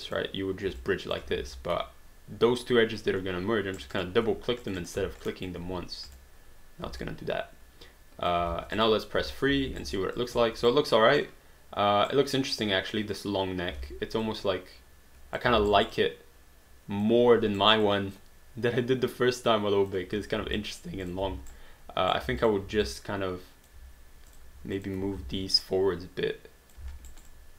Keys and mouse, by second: 0.1 click, 0.8 alt+click, 1.4 ctrl+z, 3.8 click, 4.6 shift+click, 5.3 alt+click, 6.1 click, 7.0 alt+click, 8.4 alt+d, 8.8 click, 9.2 3, 9.7 alt+d, 9.8 alt+right click, 10.2 alt+click, 10.8 right click, 12.1 right click, 12.9 click, 13.7 d, 14.2 click, 15.7 alt+right click, 16.0 alt+click, 17.6 alt+right click, 17.8 alt+click, 20.6 alt+click, 21.1 click, 21.5 right click, 22.4 alt+click, 22.9 alt+click, 24.3 click, 24.8 shift+click, 25.2 w, 25.6 click, 27.1 alt+right click, 27.3 alt+click.